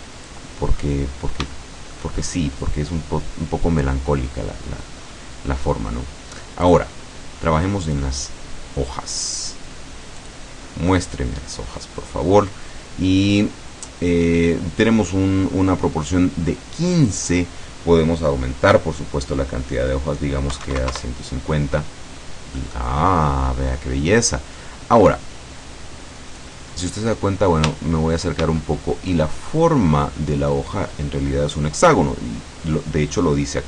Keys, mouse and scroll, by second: 0.5-1.1 scroll up 1, 1.2-1.6 scroll down 1, 1.6 shift+middle click, 3.1-5.1 scroll down 1, 5.1-5.4 scroll up 1, 5.6 scroll up 1, 6.8 click, 8.3 click, 10.3 click, 17.0 click, 20.6 KP_1, 20.7 KP_5, 20.9 KP_0, 21.0 KP_Enter, 22.2 scroll down 1, 22.6 middle click, 22.8-23.4 scroll up 3, 26.4-27.5 scroll up 4, 28.6-30.1 shift+middle drag.